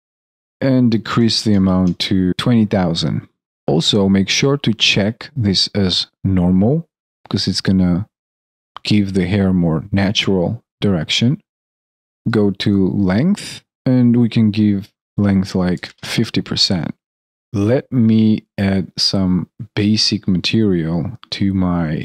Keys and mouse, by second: 17.2 alt+middle click.